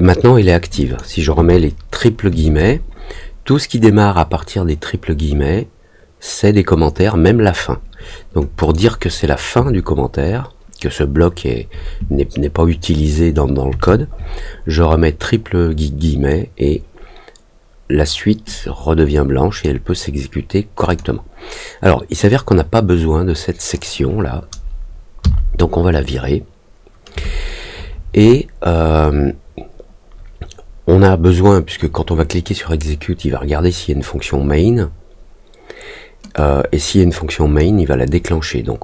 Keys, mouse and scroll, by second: 0.7 click, 8.6 click, 18.4-19.6 drag, 20.8 click, 22.2-23.7 drag, 36.3-37.5 drag.